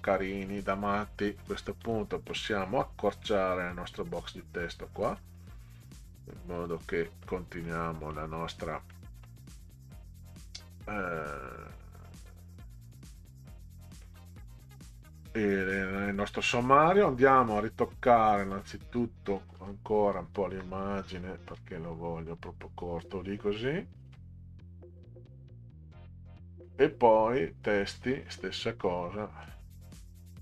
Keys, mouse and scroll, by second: 1.8 click, 2.3 middle click, 4.2-5.2 drag, 6.5 click, 7.7-8.1 middle drag, 8.9-9.2 middle drag, 12.7 click, 14.2 click, 14.9 click, 17.6 click, 18.5 click, 19.4 click, 20.3 Up, 21.5 Up, 21.7 Up, 27.7 click, 29.4 click, 29.9 Up, 30.2 Up, 30.3 Up.